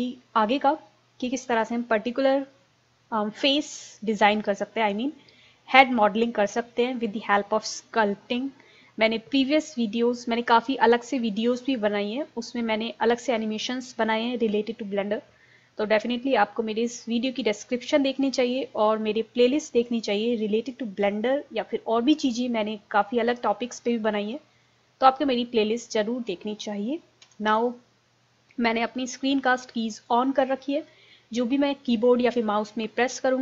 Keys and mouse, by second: 25.8-30.6 drag, 27.3 a, 27.5 a.